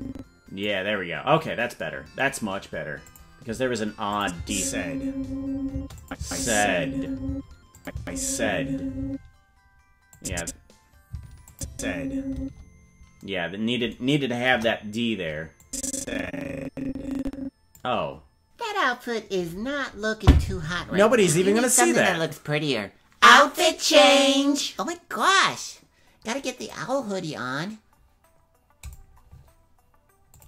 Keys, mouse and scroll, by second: 3.1 click, 4.1 click, 4.3 space, 5.7 space, 6.0 click, 6.1 space, 7.3 space, 7.7 click, 7.9 space, 9.0 space, 10.1 click, 10.3 space, 11.1 space, 11.5-12.6 drag, 11.6 space, 12.3 space, 14.5 KP_0, 15.6-17.8 drag.